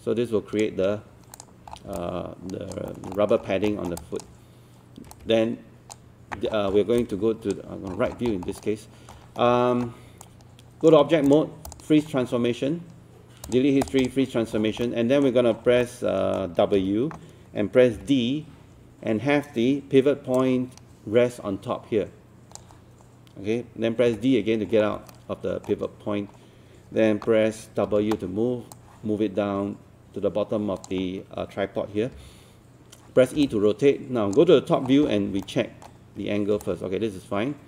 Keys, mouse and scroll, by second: 1.7 scroll down 1, 2.0 alt+click, 2.9 alt+middle click, 3.2 alt+middle click, 3.5 scroll down 1, 3.7 alt+middle click, 4.0 alt+click, 5.2 click, 6.5 scroll down 1, 7.0 click, 7.9 scroll down 1, 8.5 alt+scroll down 1, 8.6-9.3 scroll up 1, 9.3 scroll up 1, 10.2 right click, 11.3 click, 14.6 scroll down 1, 14.9 alt+middle click, 15.5 scroll down 1, 15.9-17.1 alt+middle drag, 16.8 w, 18.0 d, 20.3-23.1 drag, 24.1 d, 24.7 scroll down 1, 25.1 alt+middle click, 27.9 w, 28.7-31.1 drag, 32.2 e, 33.5 click, 34.9 scroll down 1, 35.5 alt+middle click, 36.6-37.6 drag.